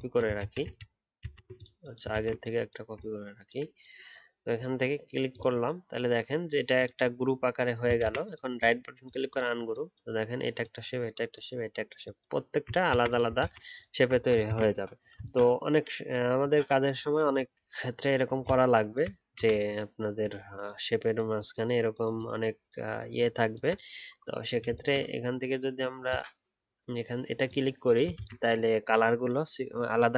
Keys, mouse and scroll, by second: 0.4 ctrl+z, 0.6 ctrl+z, 1.1 ctrl+z, 2.1 ctrl+z, 2.9 alt+click, 8.0 ctrl+z, 12.9 ctrl+z, 13.4 ctrl+z, 14.1-14.4 alt+scroll down 1, 14.4 ctrl+z, 20.4 alt+scroll up 1, 20.6 alt+click, 28.1 ctrl+z.